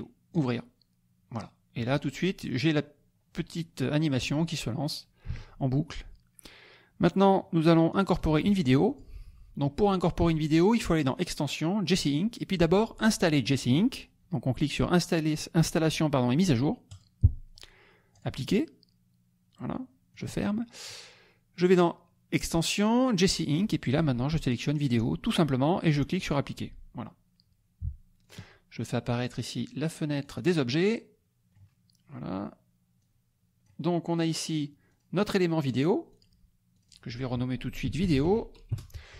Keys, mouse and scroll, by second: 0.3 click, 5.3 alt+Tab, 7.9 alt+click, 8.8 click, 11.0 click, 17.0 click, 18.1 click, 20.1 click, 21.6 click, 24.8 click, 26.1 click, 28.2 click, 29.3 click, 30.3 click, 30.8 scroll up 1, 31.0 middle click, 32.9 click, 34.9 click, 35.7 click, 36.2 click, 36.8 click, 37.6-38.7 typing.